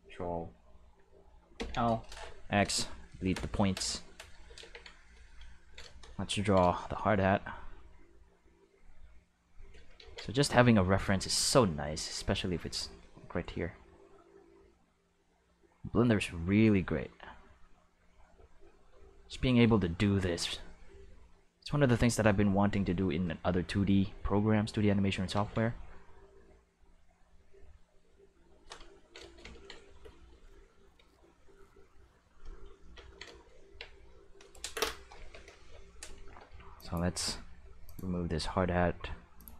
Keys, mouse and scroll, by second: 1.5 ctrl+l, 2.0 x, 2.6 Return, 4.6 ctrl+Tab, 5.1 click, 7.5-9.7 drag, 10.0 ctrl+z, 10.8-19.2 drag, 19.9 shift+middle click, 20.4-21.4 drag, 22.1 click, 23.9-25.0 drag, 25.3 ctrl+z, 25.6-28.5 drag, 30.2-32.4 drag, 33.6 Tab, 35.1 alt+a, 35.5 c, 36.2 c, 36.7 click, 37.8 click, 39.3 click.